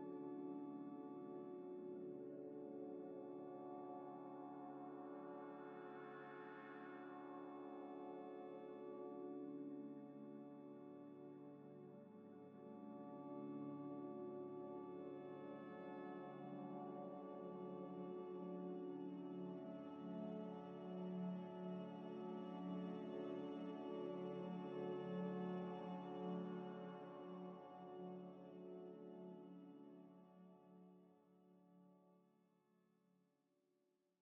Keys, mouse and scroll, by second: 1.7 right click, 3.1 u, 5.9 u, 7.1 scroll down 1, 7.3 scroll up 1, 9.3 scroll up 1, 9.3 scroll down 1, 9.7 middle click, 11.6 scroll down 1, 13.0 middle click, 17.1 scroll down 1, 17.3 middle click, 18.4 scroll down 1, 18.5 scroll up 1, 18.6 middle click, 19.0 scroll down 1, 21.3 g, 21.4 z, 23.5-23.9 scroll down 1, 24.6 Delete.